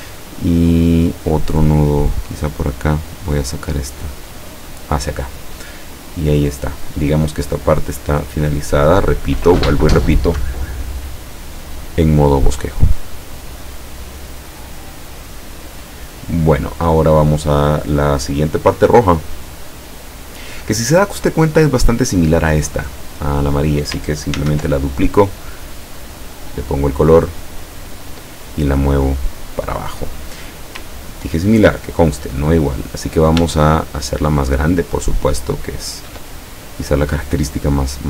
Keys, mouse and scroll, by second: 1.9 click, 2.6-5.1 drag, 23.4 click, 24.5 ctrl+d, 25.7 click, 26.3 click, 27.9 click, 28.8-30.5 drag, 31.4-31.9 ctrl+scroll down 2, 33.8-36.3 ctrl+shift+drag, 36.8 click, 37.7-38.0 drag.